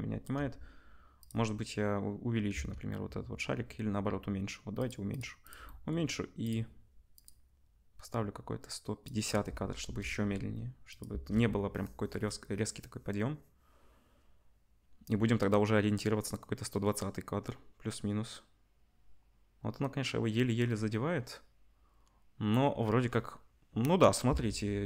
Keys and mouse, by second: 0.3 s, 2.5 s, 5.1 click, 5.1 middle click, 5.4 click, 5.4-6.4 middle drag, 6.4 click, 6.4 middle click, 7.2-24.8 drag, 9.7 KP_0, 11.3 space, 24.3 space.